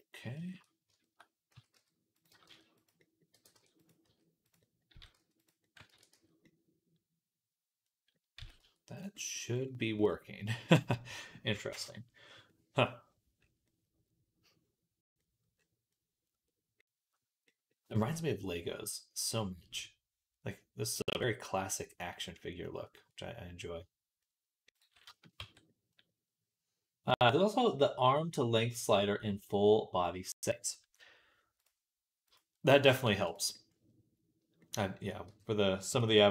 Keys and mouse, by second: 1.4 s, 2.1 g, 3.2 g, 3.9 s, 4.8 s, 5.7 ctrl+a, 8.2 s, 9.4-12.1 middle drag, 12.1-13.5 drag, 13.5-14.9 middle drag, 14.9-24.5 middle drag, 24.5 click, 24.6-31.5 middle drag, 25.2 Tab, 31.5 click, 32.2-36.3 middle drag, 32.9 shift+d, 35.1 g, 36.2 e.